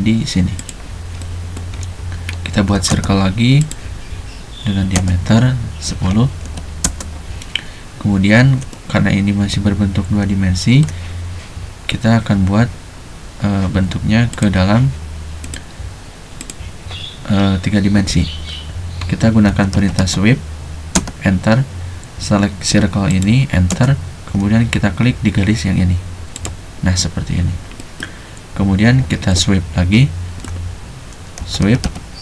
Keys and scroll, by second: 2.7 c, 4.8-6.8 typing, 19.4-21.0 typing, 23.7 space, 31.4-32.2 typing.